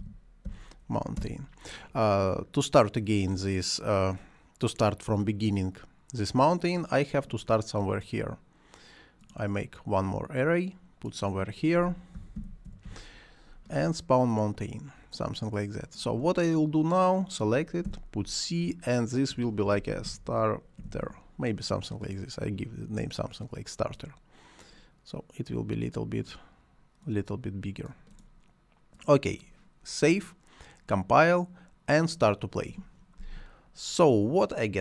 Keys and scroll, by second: 0.0-0.5 typing, 1.2 Return, 11.9-13.3 typing, 17.8 c, 19.4-21.5 typing.